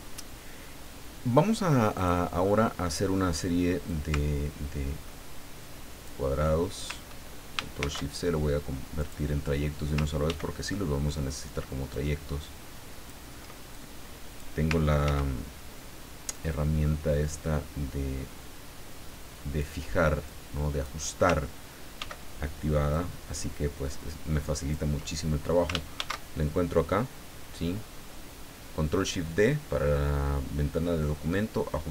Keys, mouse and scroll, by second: 1.9 click, 3.9-6.2 ctrl+drag, 7.8 ctrl+shift+c, 9.0 click, 10.2 ctrl+d, 11.9-13.2 ctrl+drag, 13.7 ctrl+click, 15.0 ctrl+d, 16.3-19.7 ctrl+drag, 20.2 ctrl+click, 22.0 ctrl+d, 22.9-24.9 ctrl+drag, 25.9 ctrl+shift+d.